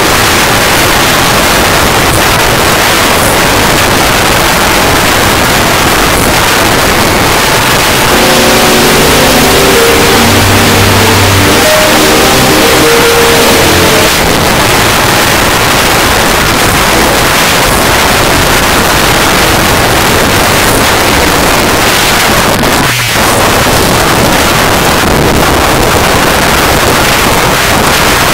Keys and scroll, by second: 14.1 Page_Down.